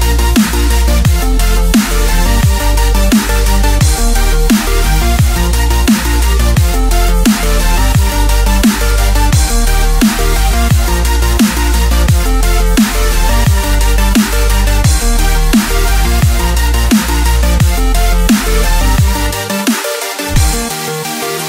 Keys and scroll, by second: 0.4-1.0 typing, 6.5-7.3 space, 7.9 super+z, 8.4 super+z, 9.8 a.